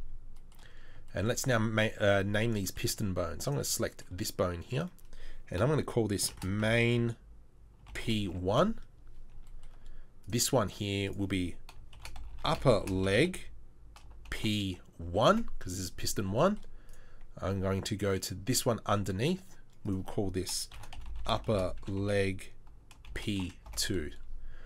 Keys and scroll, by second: 12.3 p, 21.1 p.